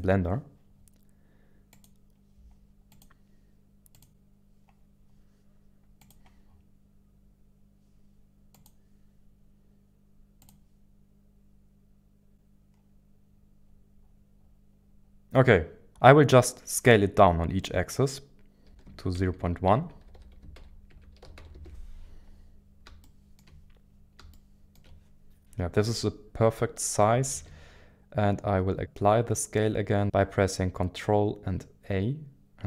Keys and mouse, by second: 1.9-4.1 drag, 15.9-22.3 drag, 23.0 shift+middle click, 24.3 shift+middle click, 25.4 KP_1, 25.4 KP_7, 27.3 ctrl+a.